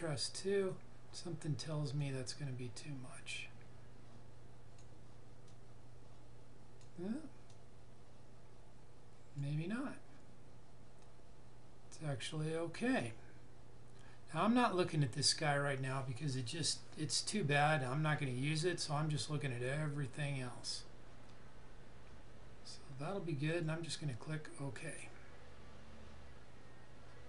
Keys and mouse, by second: 23.4 click.